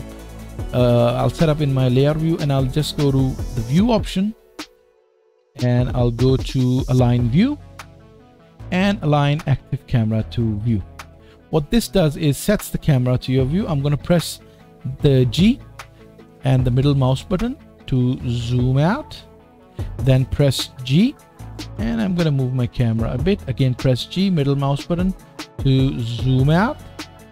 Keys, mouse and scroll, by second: 0.7-19.6 drag, 15.2 g, 19.6-27.3 middle drag, 20.7 g, 23.7 g.